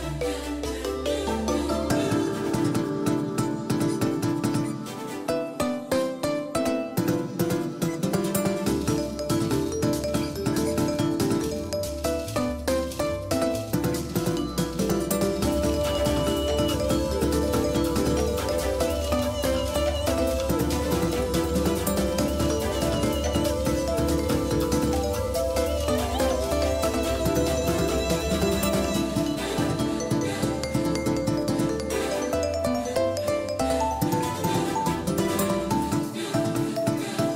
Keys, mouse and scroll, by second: 2.0-4.1 drag, 4.2 click, 5.6-9.5 drag, 13.1-15.0 middle drag, 15.0-17.3 drag, 21.0 KP_3, 22.8 KP_1, 27.1-29.5 drag, 29.5 KP_1, 30.0 KP_3, 32.7-34.9 drag, 35.3-37.3 middle drag.